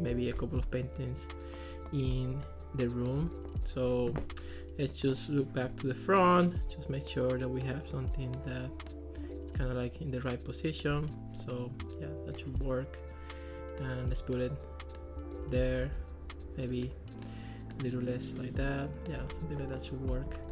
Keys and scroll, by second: 15.9 super+z.